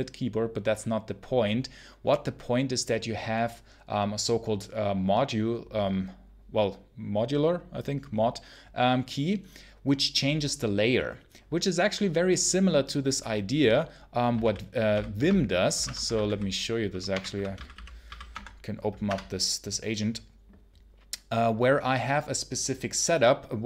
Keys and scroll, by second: 14.3 ctrl+super+l, 14.8 ctrl+super+l, 15.7 super+Return, 15.8-18.6 typing, 18.9 Return.